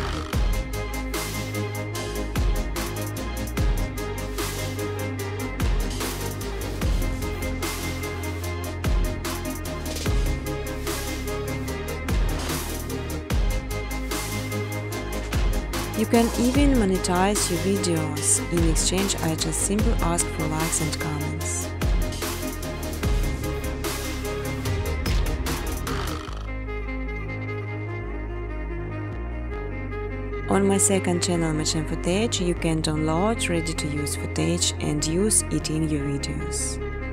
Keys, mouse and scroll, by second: 0.3 click, 1.6 click, 3.0 click, 4.5-5.2 typing, 4.6 Tab, 6.4 Tab, 6.6-7.6 typing, 6.7 Tab, 8.8-12.6 typing, 13.6 click, 14.9 click, 15.0-16.3 typing, 18.0 click, 18.3 click, 18.9-19.7 typing, 19.4 click, 22.9 click, 23.3 click, 25.3 click, 25.7 click, 25.9-26.4 typing, 26.5 click, 27.5 click, 30.1 alt+click, 30.9-32.7 typing, 33.9-36.1 typing, 34.1 click, 34.7 click.